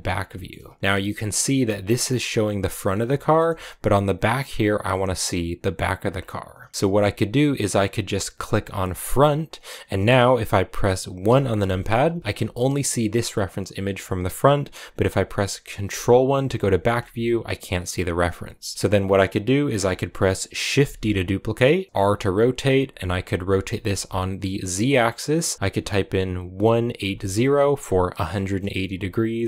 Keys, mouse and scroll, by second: 0.0 scroll down 1, 0.2 shift+middle click, 0.4-1.1 scroll up 3, 3.0-5.9 shift+middle drag, 5.9-6.5 scroll down 4, 6.7 scroll up 1, 6.7-7.3 scroll down 1, 9.0-11.2 drag, 11.2 KP_1, 12.2 g, 16.5 ctrl+KP_1, 18.9-20.2 scroll down 1, 20.7 shift+d, 21.9 click, 23.0-24.9 drag, 25.3-26.8 drag.